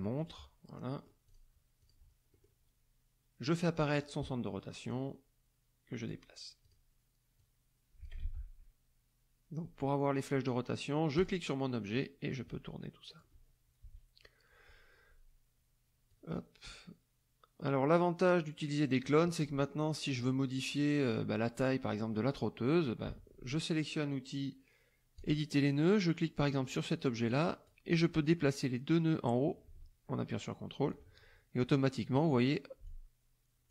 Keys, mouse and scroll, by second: 0.1 click, 0.8-1.2 middle drag, 1.8 click, 2.3 middle click, 3.9 click, 4.9-6.2 drag, 6.6 click, 7.3 click, 8.2 ctrl+z, 11.1 click, 11.9-13.3 drag, 13.8 KP_Subtract, 16.1-19.0 drag, 19.0 middle click, 20.2 middle click, 22.1 middle click, 25.2 click, 26.5 click, 27.3 click, 29.1-31.1 drag, 32.9 ctrl+click.